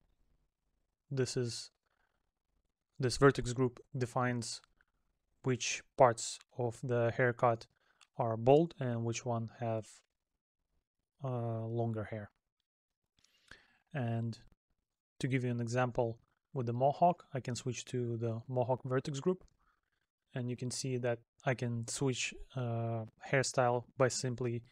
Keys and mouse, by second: 5.3 middle click, 9.0 middle click, 10.6 middle click, 12.7 middle click, 20.3 middle click, 23.2 middle click.